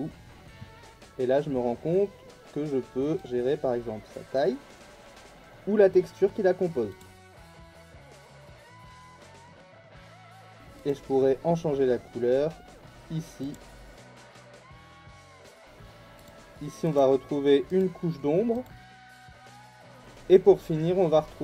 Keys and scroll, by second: 9.5 ctrl+z, 15.2 ctrl+z.